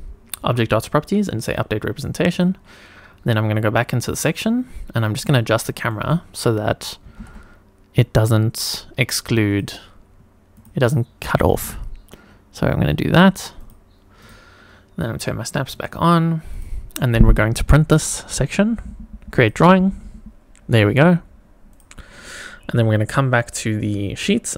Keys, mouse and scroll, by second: 1.4 click, 2.3 click, 4.0 click, 5.1 click, 5.6 shift+middle click, 7.0 g, 7.2 z, 9.5 click, 10.5 click, 11.4 g, 11.5 z, 13.6 click, 14.2 click, 15.7 click, 16.5 click, 17.9 click, 19.3 click, 21.7 click, 24.5 click.